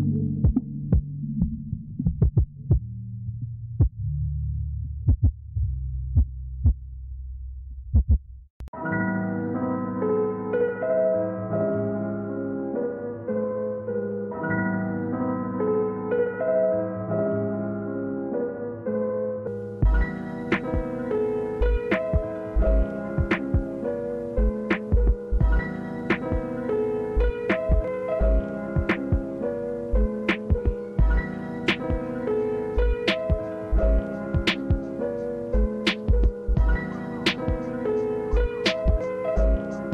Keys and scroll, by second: 14.0 s, 14.4 space, 19.3 space, 21.3 space, 21.9 space, 23.6 space, 25.1 space, 30.1 space, 31.2 space, 32.5 space, 33.9 s, 34.9 space, 35.8 s, 38.8 space, 39.6 space.